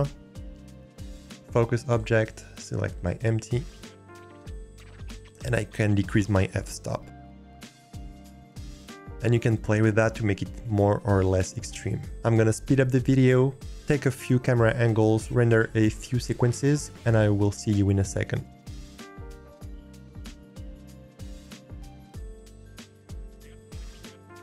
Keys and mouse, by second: 6.4-9.1 drag, 18.4 middle click, 18.5 click, 19.4 ctrl+s, 20.3 n, 20.4 click, 20.6 shift+click, 20.7 middle click, 20.9 middle click, 21.2 alt+click, 21.7 click, 22.7 click, 22.9 g, 23.1 click, 23.3 click, 23.8 click, 24.3 n.